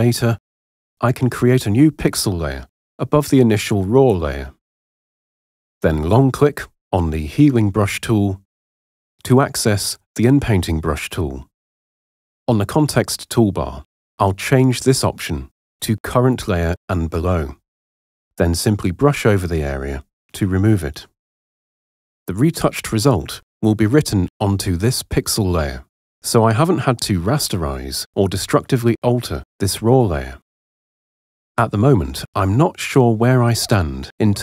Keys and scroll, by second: 19.0 [, 22.3 h, 32.4 super+0.